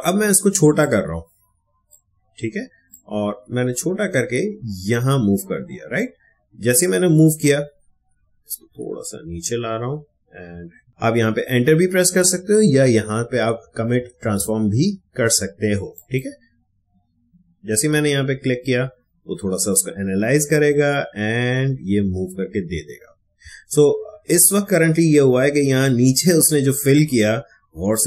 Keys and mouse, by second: 0.7-8.3 shift+drag, 15.9 click, 24.0 space, 24.7-27.3 ctrl+drag, 27.3 space, 27.9 click.